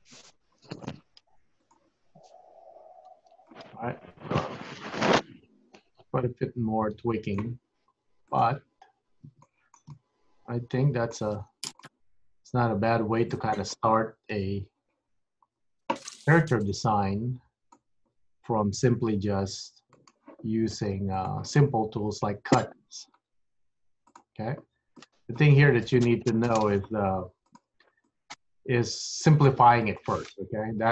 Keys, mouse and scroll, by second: 0.0 g, 1.0 click, 1.3 g, 2.7 click, 3.1 g, 3.9 scroll down 4, 4.4 middle click, 8.4 click, 8.9-9.3 scroll up 3, 9.6 shift+middle click, 10.0 middle click, 11.4-13.4 scroll down 3, 11.9 middle click, 14.4 KP_1, 15.3-17.0 scroll up 6, 17.0 click, 19.1 g, 21.3 click, 21.9 scroll up 2, 22.7 click, 23.4 g, 25.0 click, 25.6 g, 26.4 click, 27.0 g, 28.1 click, 29.9 click, 30.4 g.